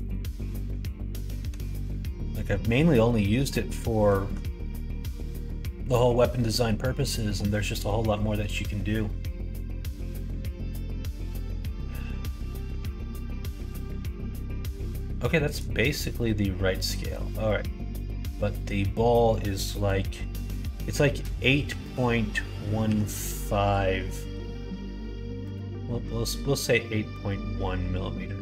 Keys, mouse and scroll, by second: 1.6 ctrl+s, 15.6-28.4 drag.